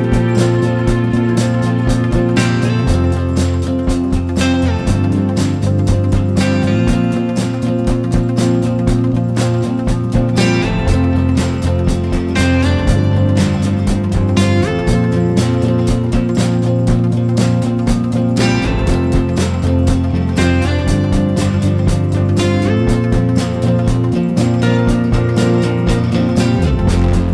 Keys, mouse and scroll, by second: 19.1 click, 19.6 scroll down 1, 19.7 middle click, 20.2 scroll up 1, 21.0-21.5 scroll up 4, 21.9 scroll down 1, 22.2 scroll up 2, 22.4 click, 23.2 Tab, 23.8 ctrl+r.